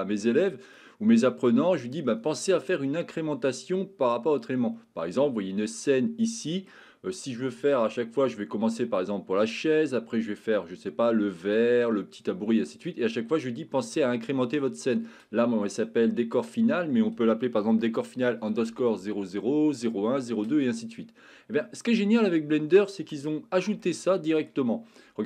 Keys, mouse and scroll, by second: 0.8 middle click, 5.8 middle click, 22.3 middle click, 23.8 shift+middle click.